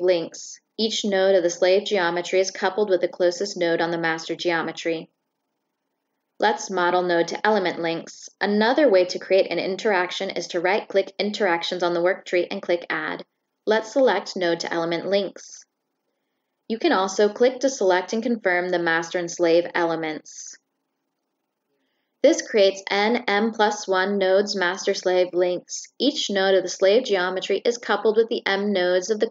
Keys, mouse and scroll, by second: 0.4 ctrl+middle click, 2.0 middle click, 10.8 click, 12.3 click, 14.0 click, 15.3 click, 18.1 click, 19.9 click, 20.1 right click, 20.7 click, 21.4 right click, 29.0 click.